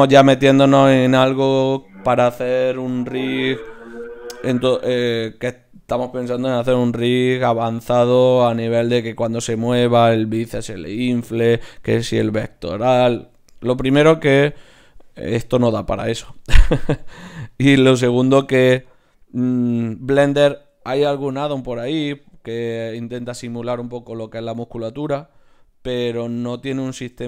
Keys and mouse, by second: 0.3 click, 0.8 Tab, 1.5-2.9 drag, 2.9 right click, 3.7 e, 5.5-9.0 drag, 6.6 ctrl+alt+s, 7.1 right click, 25.7-27.2 right drag.